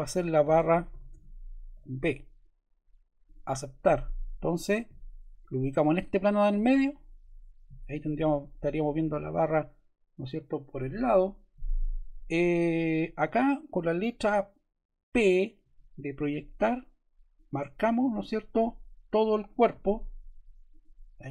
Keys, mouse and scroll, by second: 0.1-2.1 typing, 15.5 p, 17.3 click, 19.4 click, 20.6 click.